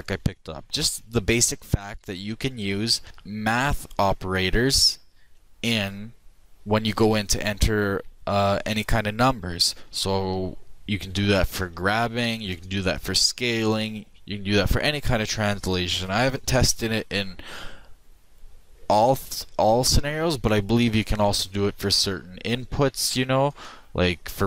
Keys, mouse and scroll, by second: 2.0 ctrl+z, 2.5 ctrl+z, 3.5 ctrl+z, 4.7 ctrl+z, 11.6 g, 23.5 click.